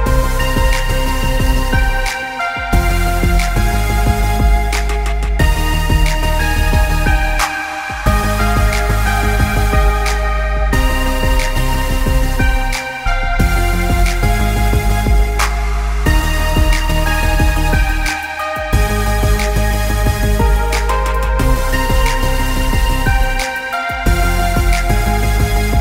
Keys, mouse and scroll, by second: 2.9 click, 7.8 click, 12.5 click, 20.8 click, 22.6 KP_1, 22.7 KP_0, 22.9 KP_Enter, 24.0 click, 25.5 click.